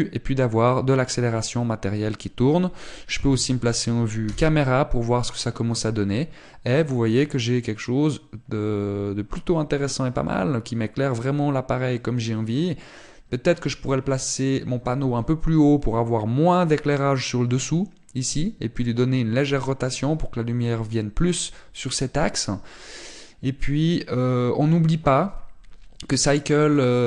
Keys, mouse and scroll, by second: 1.8 middle click, 5.2 KP_0, 6.2 scroll up 1.